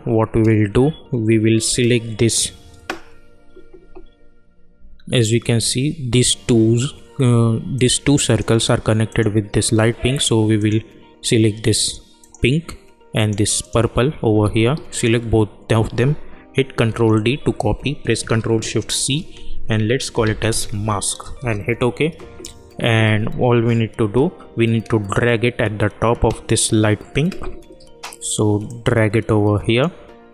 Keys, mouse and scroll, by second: 4.7 alt+Num_Lock, 4.7 click, 5.0 alt+scroll up 1, 7.7 click, 16.8 ctrl+d, 18.9 ctrl+shift+c, 19.9-21.1 typing, 21.3 Return, 28.6-30.3 drag.